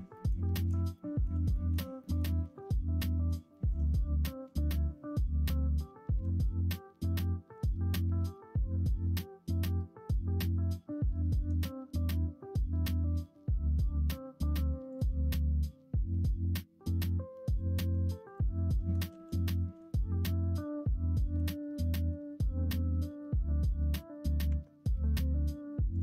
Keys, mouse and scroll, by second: 0.1 middle click, 0.4 middle click, 0.9 middle click, 1.4 shift+middle click, 2.0 middle click, 2.9 middle click, 3.4 shift+middle click, 16.8 middle click, 17.4 click, 17.7 middle click, 17.9 Tab, 18.2 click, 18.8 middle click, 19.0 alt+z, 19.3 middle click, 19.9-21.3 middle drag, 21.6 middle click, 22.5 middle click, 23.5 click, 24.4 Tab, 24.8 middle click.